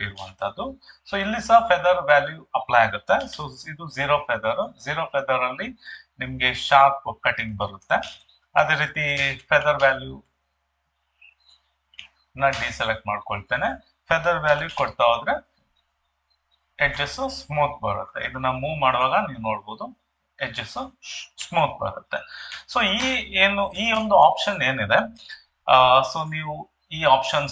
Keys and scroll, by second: 3.2 0.